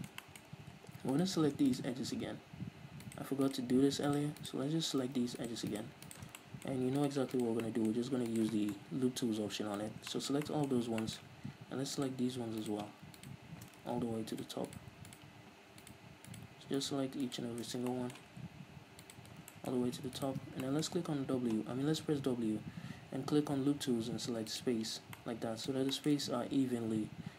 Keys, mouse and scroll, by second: 0.1-1.3 shift+middle drag, 0.6-1.3 scroll up 2, 1.3-5.2 alt+right drag, 5.2 ctrl+z, 5.6 alt+shift+right click, 6.5 shift+middle click, 7.2 alt+shift+right click, 7.9 middle click, 8.5 alt+shift+right click, 8.8 scroll down 2, 8.9-12.2 middle drag, 10.1 scroll down 2, 10.8-11.2 scroll up 2, 12.2-14.0 alt+shift+right drag, 14.0 ctrl+z, 14.6 alt+shift+right click, 17.8 scroll up 1, 18.1-19.2 shift+middle drag, 19.2 alt+shift+right click, 19.5 scroll down 1, 19.7 shift+middle click, 20.4 alt+shift+right click, 20.6 scroll down 1, 20.8-27.3 shift+middle drag, 21.4 w.